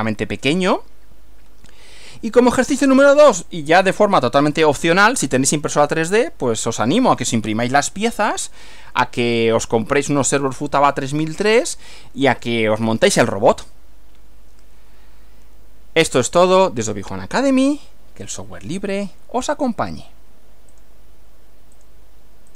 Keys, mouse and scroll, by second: 2.2 Right, 20.8 click, 21.8 click, 22.5 click.